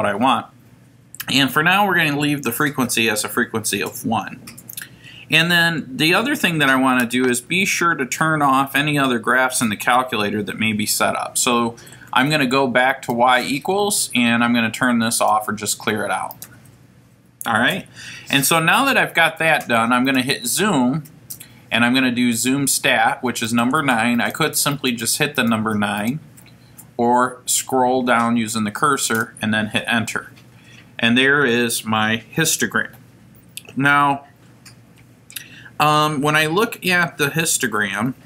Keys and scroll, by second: 15.2 Down, 23.5 Down, 29.1 Return.